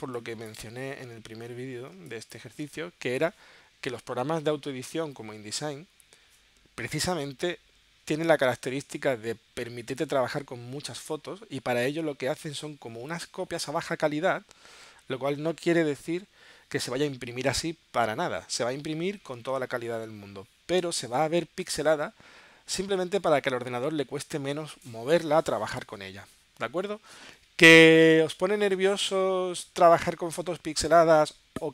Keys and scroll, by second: 1.9 space.